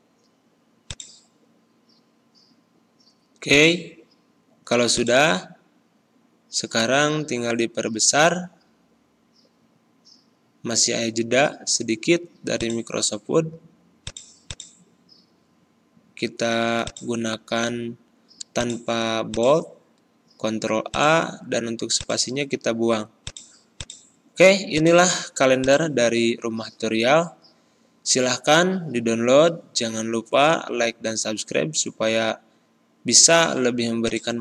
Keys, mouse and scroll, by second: 0.8 click, 5.2 ctrl+a, 6.6 ctrl+], 10.5 click, 15.7 ctrl+b, 16.7 click, 17.8 ctrl+b, 18.5 click, 19.5 ctrl+a, 20.9 click, 26.8 ctrl+scroll down 1, 34.0-34.4 drag.